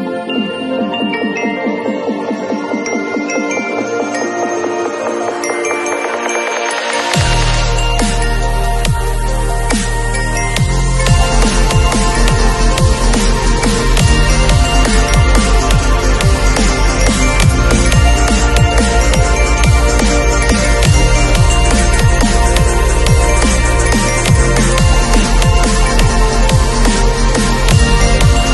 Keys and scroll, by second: 2.9 ], 12.5 2, 19.1 v.